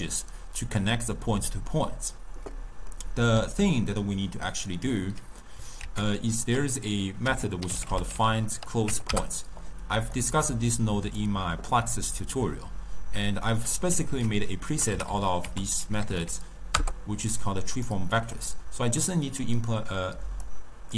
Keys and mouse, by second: 3.0-5.9 middle drag, 5.9 ctrl+a, 10.5-13.7 drag, 14.2 ctrl+a, 15.1 e, 18.1-19.1 middle drag, 19.1 click.